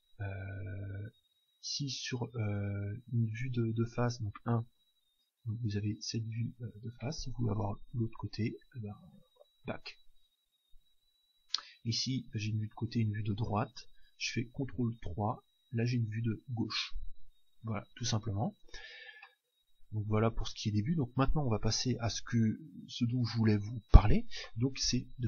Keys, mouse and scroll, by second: 1.2 KP_1, 7.9 ctrl+KP_1, 12.0 KP_3, 14.8 ctrl+KP_3, 19.2-21.2 middle drag.